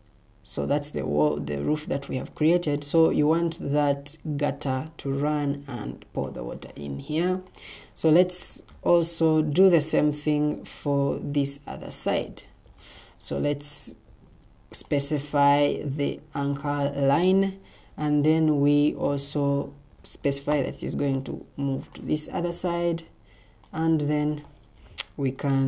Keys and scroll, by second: 12.4 Escape.